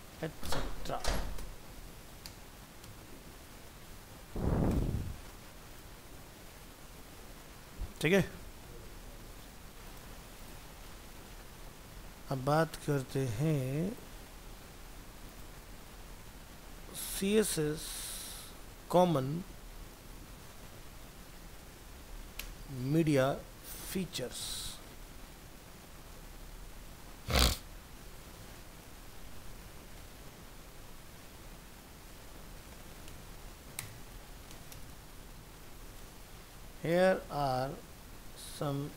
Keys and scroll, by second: 3.3 ctrl+s, 14.3 ctrl+c, 16.2 ctrl+v, 16.5 ctrl+s, 19.2 shift+Right, 19.8 ctrl+Left, 24.4 ctrl+shift+Left.